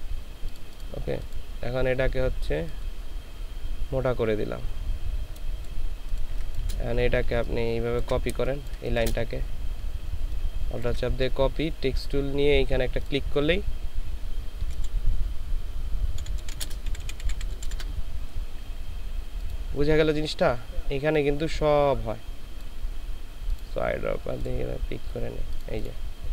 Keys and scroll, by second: 6.3 ctrl+space, 6.9 ctrl+alt+space, 8.3 ctrl+alt+space, 9.5 ctrl+alt+space, 14.7 shift+l, 16.2-17.7 typing.